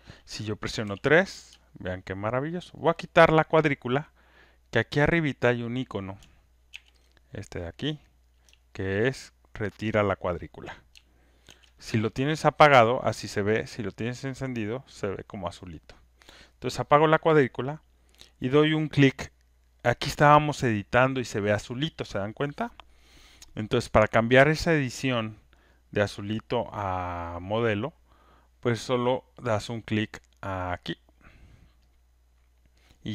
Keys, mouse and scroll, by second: 0.8 alt+right click, 2.2 alt+3, 2.2 alt+click, 2.6 alt+middle click, 3.0 alt+click, 5.3 click, 6.6 ctrl+F1, 7.3 click, 11.8 ctrl+click, 13.2 click, 15.3 click, 17.5 click, 32.0 click.